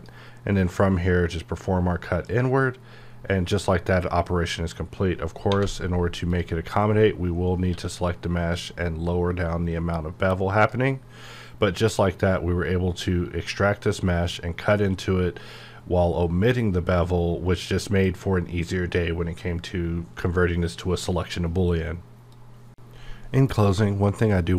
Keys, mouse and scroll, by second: 0.0 click, 2.3 click, 5.5 1, 6.2 click, 6.8-7.6 scroll up 1, 7.6 q, 8.5 click, 10.9 scroll down 1.